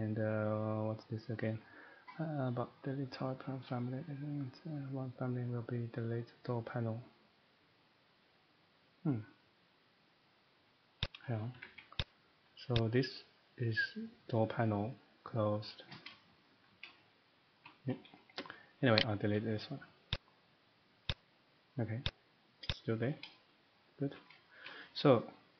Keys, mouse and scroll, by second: 11.0 click, 11.5 Escape, 11.7 Escape, 12.0 click, 12.7 click, 16.4 shift+middle click, 17.6 shift+middle click, 19.0 click, 23.6 right click, 23.6 click, 24.2 shift+middle click, 24.3 middle click, 24.6 shift+middle click, 25.1 middle click.